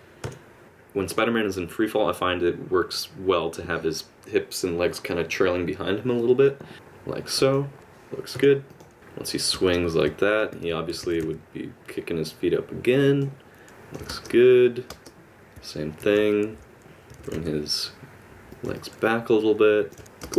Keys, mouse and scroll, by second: 0.2 i, 0.6 click, 0.6 space, 6.7 middle click, 6.7 r, 9.0 space, 9.5 space, 10.2 middle click, 10.5 alt+r, 13.6 middle click, 13.6 r, 13.6 i, 14.1 space, 14.9 space, 16.0 alt+r, 16.5 x, 17.1 r, 18.7 middle click, 20.0 i, 20.2 space.